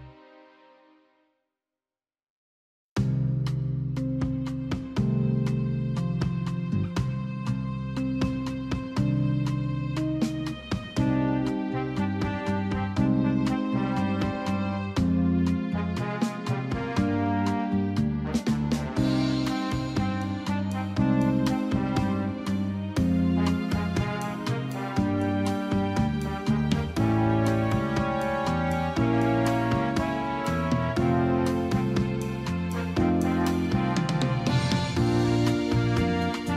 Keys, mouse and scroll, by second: 3.7 Up, 7.7 click, 11.6 alt+Num_Lock, 11.6 alt+click, 13.2 KP_4, 13.4 KP_5, 14.7 click, 17.6 ctrl+d, 18.1-19.6 typing, 21.4 click, 24.2 Delete, 24.4 click, 24.9 Delete, 26.1 click, 36.1 click.